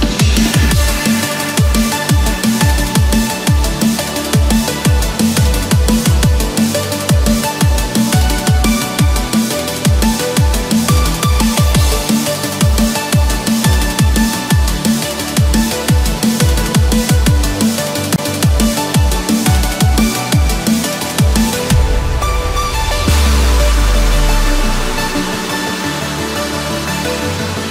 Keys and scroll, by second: 17.8 ctrl+-, 20.5 ctrl+=.